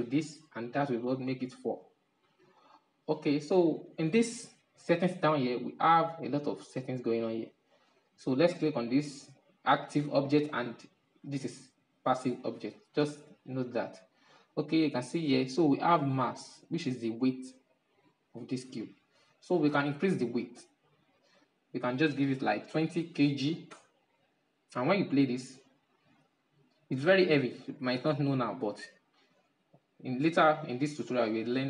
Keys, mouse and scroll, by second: 0.5-5.2 drag, 5.2-6.1 scroll down 5, 6.4-6.8 scroll up 3, 6.8 scroll down 3, 8.5 right click, 20.3-23.5 drag, 24.8-28.8 drag, 28.8-31.6 middle drag.